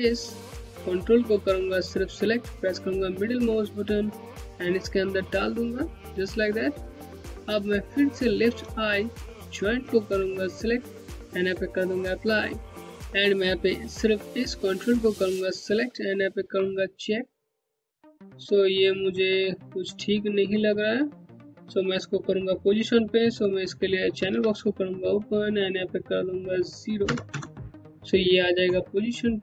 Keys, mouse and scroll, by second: 0.1 click, 2.3 middle click, 7.8 ctrl+Num_Lock, 9.2 ctrl+click, 11.7 click, 14.1 Home, 15.4 scroll down 1, 15.6 alt+click, 15.9 Home, 16.6 click, 16.8 Home, 18.6 Home, 23.7 alt+c, 25.4 click, 25.6 Home, 26.6 KP_0, 26.8 KP_Enter.